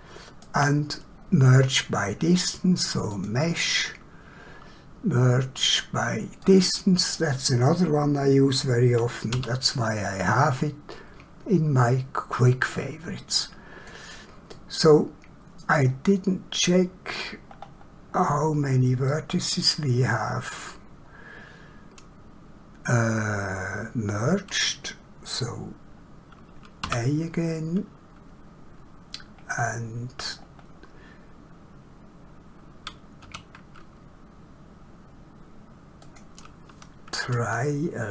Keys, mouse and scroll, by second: 3.2 click, 6.5 click, 9.4 q, 13.3 click, 14.6 middle click, 17.5 scroll down 1, 18.2 scroll up 1, 19.0 middle click, 26.8 a, 29.4-29.9 scroll up 1, 30.4 scroll down 1, 33.3 q, 36.1 click.